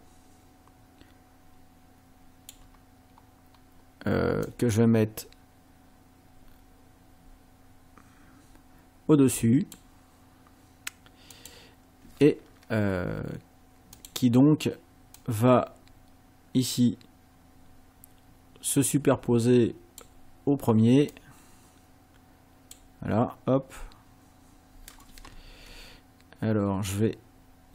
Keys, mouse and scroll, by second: 3.5 scroll up 1, 4.4-9.9 drag, 11.3 click, 14.0 click, 15.2-20.2 drag, 21.1-22.9 drag.